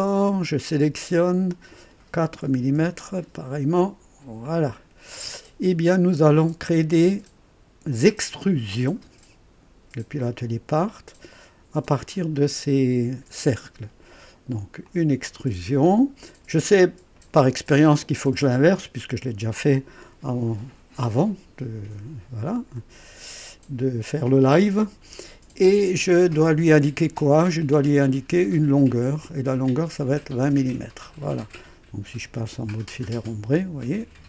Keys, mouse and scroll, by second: 0.2 click, 1.5 click, 2.4 KP_4, 2.8 KP_Enter, 2.8 Return, 4.4 click, 5.3 scroll down 1, 6.4 click, 10.4 click, 11.8 click, 14.8 click, 17.7 click, 19.5-22.9 drag, 28.9 click, 30.2 KP_2, 30.4 KP_0, 30.7 KP_Enter, 33.4 &.